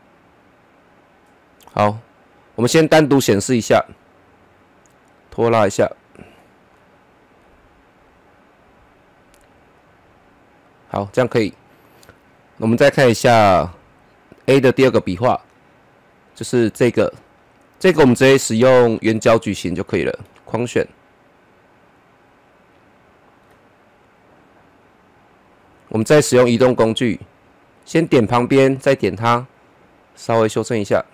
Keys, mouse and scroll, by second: 2.6-6.7 drag, 6.7-8.5 middle drag, 8.5-11.1 drag, 11.1-13.2 middle drag, 13.2 click, 15.7-17.5 scroll down 1, 18.1 click, 18.6-23.9 drag, 23.9-25.7 scroll up 1, 26.4 click, 26.5 click, 29.0-31.1 drag.